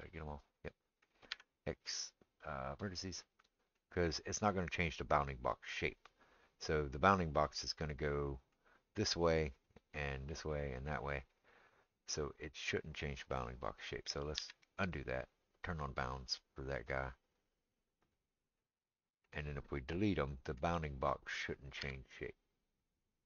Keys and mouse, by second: 1.3 x, 2.8 middle click, 14.4 ctrl+z, 18.1-23.2 middle drag, 21.8 x.